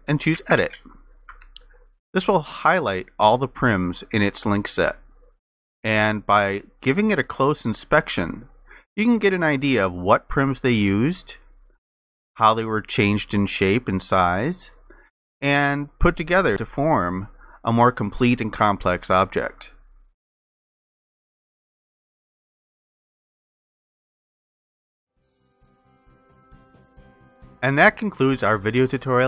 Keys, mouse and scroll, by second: 2.3 alt+click, 6.4 alt+click, 10.4 alt+click, 12.7 ctrl+alt+click, 15.5 alt+click, 17.9 alt+click, 19.7 alt+click, 23.6 alt+click.